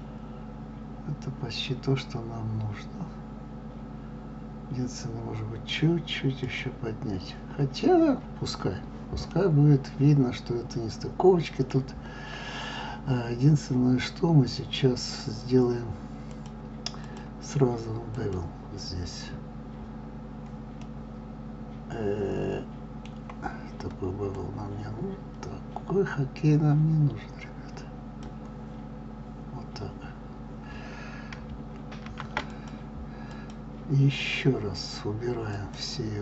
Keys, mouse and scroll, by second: 0.0-2.9 middle drag, 6.3 click, 9.3-16.3 middle drag, 16.3-20.8 drag, 20.8-24.3 middle drag, 24.3-27.2 drag, 32.7 click, 33.3 click.